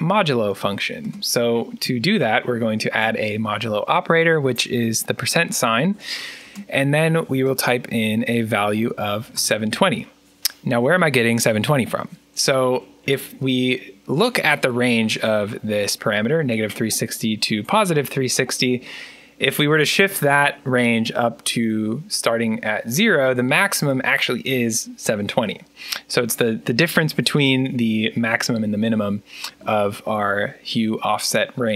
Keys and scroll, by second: 2.7 shift+5, 8.3-9.7 typing, 12.9 Return, 17.5 Return.